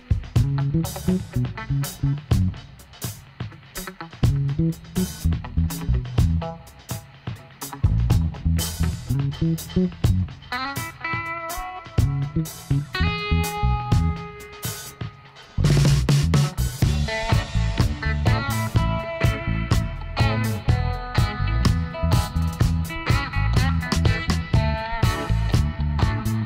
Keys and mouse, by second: 0.4 r, 6.1-10.3 middle drag, 7.2 KP_7, 9.5 g, 11.7-13.5 middle drag, 13.5 p, 14.5 Tab, 15.0-16.8 drag, 16.4 ,, 17.0 m, 19.4-21.8 drag, 25.7 r.